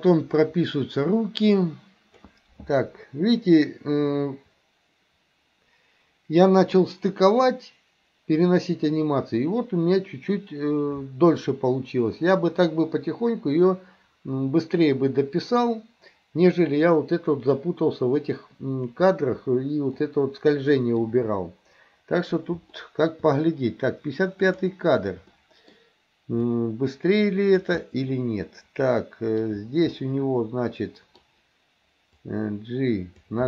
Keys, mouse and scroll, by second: 20.0-21.0 middle drag, 22.8 shift+middle click, 24.5 click, 25.4-25.7 middle drag, 26.5-27.7 drag, 27.8-31.2 middle drag, 32.2-33.3 drag.